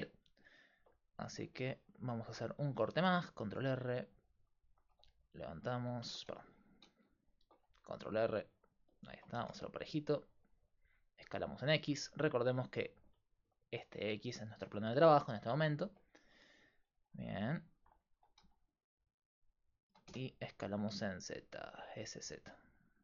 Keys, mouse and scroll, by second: 1.6 ctrl+r, 3.1 s, 4.7 g, 6.1 ctrl+z, 6.9 ctrl+z, 7.4 ctrl+r, 8.9-10.4 right drag, 9.4 s, 12.0 middle click, 12.2-17.4 middle drag, 17.4 right click, 18.2 s, 19.9 s.